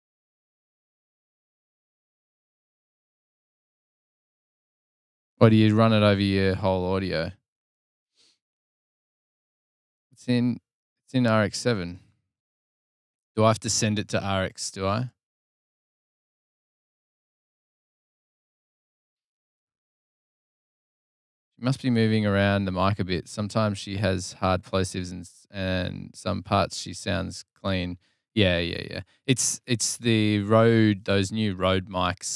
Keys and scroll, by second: 7.7 super+[, 7.8 super+[, 13.0 super+[.